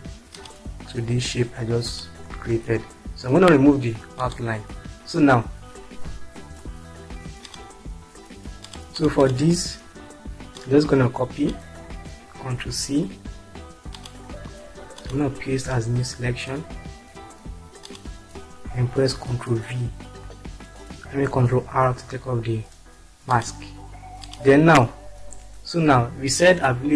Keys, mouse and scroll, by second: 1.8 click, 2.9 space, 6.7-7.0 scroll down 2, 7.4 click, 9.7 click, 13.0 ctrl+c, 21.3 ctrl+r, 23.3 click.